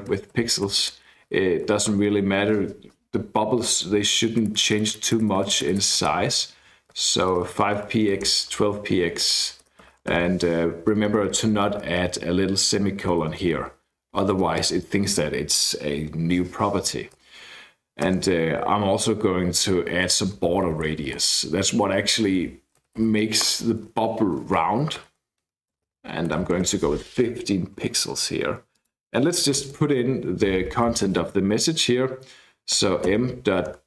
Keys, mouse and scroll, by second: 0.0-1.1 typing, 4.3-10.6 typing, 10.8 Left, 10.9 Left, 11.2 Left, 11.4 Left, 11.6 Left, 13.0 shift+Right, 13.2 shift+Right, 13.4 shift+Right, 14.3 Right, 14.5 Left, 18.1 space, 20.1-23.6 typing, 25.0-27.1 typing, 28.7 click, 29.6 Tab, 29.7 Tab, 30.6 {, 30.7 {, 32.8-33.8 typing.